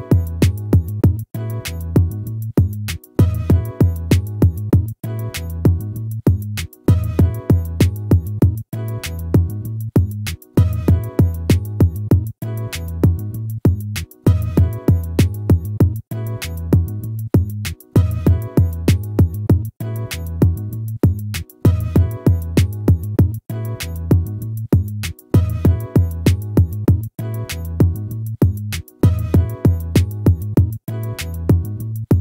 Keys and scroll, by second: 23.8 ctrl+-, 31.6 ctrl+-.